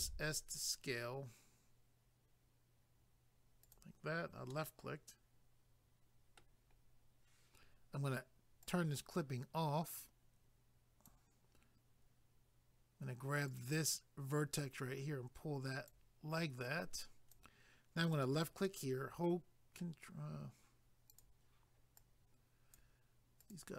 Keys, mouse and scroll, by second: 0.0 s, 3.6 click, 4.5 middle click, 6.8 scroll up 1, 8.6 click, 9.9 click, 13.5 click, 14.6 click, 16.7 click, 17.3 click, 18.0 click, 18.7 middle click, 21.1 click, 22.0 click, 23.4 click.